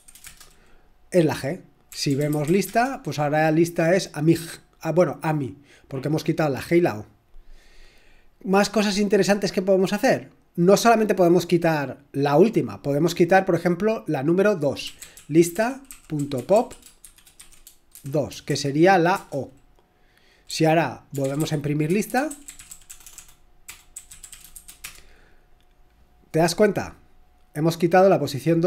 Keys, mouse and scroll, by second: 0.0-0.4 typing, 1.6-2.9 typing, 14.7-18.5 typing, 19.1 Return, 20.5-24.8 typing.